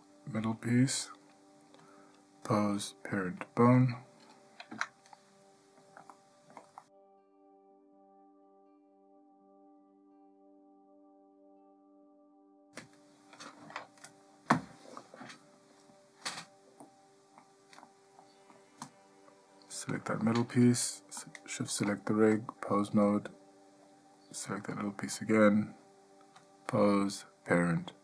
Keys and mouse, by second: 0.2 click, 0.7 click, 2.0-4.0 drag, 4.9 Tab, 6.3-6.8 ctrl+shift+middle drag, 7.2 ctrl+shift+middle drag, 7.6 ctrl+shift+middle drag, 8.1 ctrl+shift+middle drag, 17.0-17.6 middle drag, 18.0-18.7 shift+middle drag, 19.0 click, 22.6-23.3 drag, 26.6-28.0 drag.